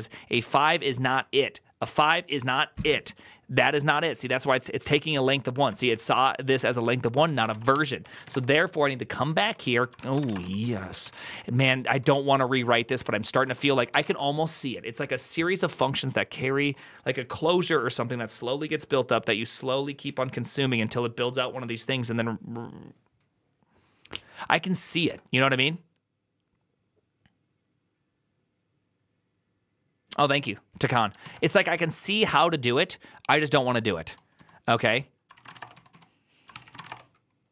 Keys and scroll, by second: 5.8 typing, 7.0-8.1 typing, 7.9 ctrl+c, 8.2 Return, 9.1 ctrl+u, 9.3 ctrl+u, 9.8-10.6 typing, 10.9 ctrl+d, 11.6 ctrl+d, 11.6 ctrl+u, 12.1 ctrl+u, 12.5 ctrl+u, 12.8 ctrl+c, 13.0 ctrl+c, 13.6-14.4 typing, 33.2 alt+{, 33.2-33.9 typing, 35.0-37.5 typing.